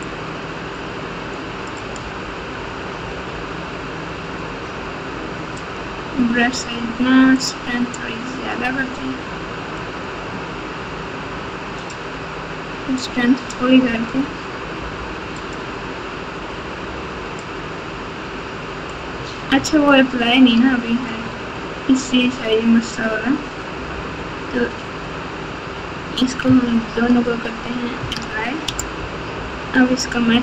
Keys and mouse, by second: 0.0-1.7 drag, 3.0 f, 7.3-8.5 drag, 9.8-11.8 drag, 12.9 click, 14.7 f, 17.4-18.9 drag, 19.5 Tab, 21.1 Tab, 27.0 ctrl+a, 28.0 ctrl+a, 29.6 Tab, 30.3 Tab.